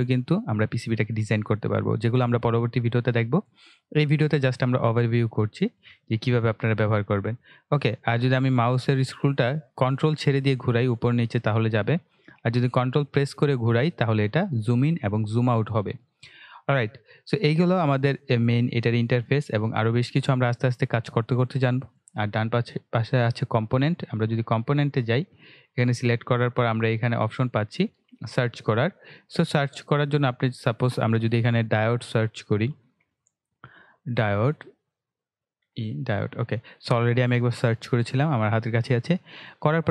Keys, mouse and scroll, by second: 0.8-1.3 ctrl+scroll down 1, 7.7-8.1 scroll up 1, 8.1 scroll down 1, 9.2-9.5 scroll up 1, 10.4 scroll down 1, 11.2-11.5 scroll up 1, 11.8 scroll down 1, 13.4 ctrl+scroll down 1, 14.7-15.2 ctrl+scroll up 1, 15.2 ctrl+scroll down 1, 18.4-22.8 ctrl+middle drag, 22.8 click, 28.6 click, 32.0-32.8 typing, 34.6 typing, 35.6 e, 39.4-39.9 scroll down 1.